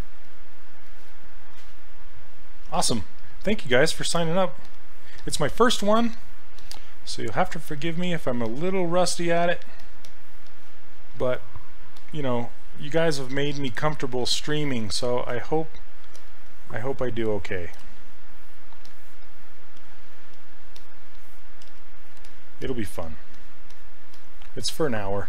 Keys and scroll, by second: 2.7 s, 21.7 s.